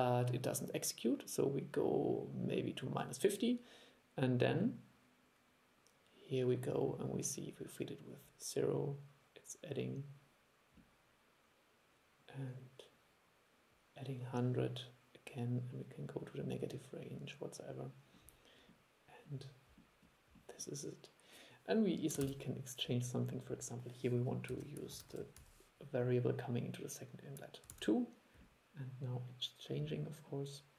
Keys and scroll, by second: 22.4 super+e, 27.8 super+e.